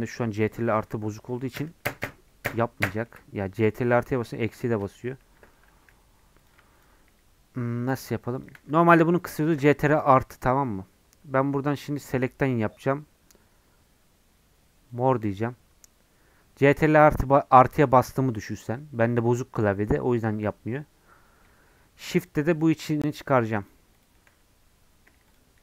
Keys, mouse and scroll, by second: 4.8 ctrl+KP_Add, 6.5 click, 8.1 shift+click, 9.5 ctrl+KP_Subtract, 15.0-22.3 drag, 24.0 shift+click, 25.4 shift+click.